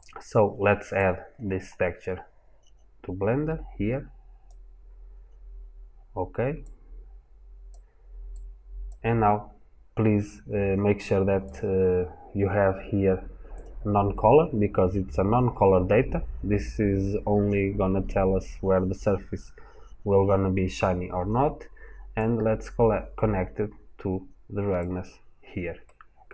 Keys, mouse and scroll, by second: 3.0 click, 6.4 click, 25.7 middle click.